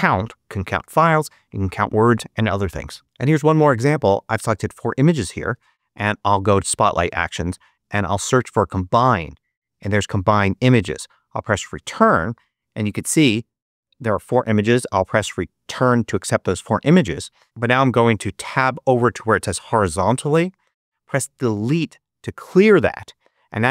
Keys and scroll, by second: 5.5 super+space, 6.0 super+3, 7.3-8.6 typing, 10.8 Return, 15.6 Return, 18.8 Tab, 21.5 BackSpace.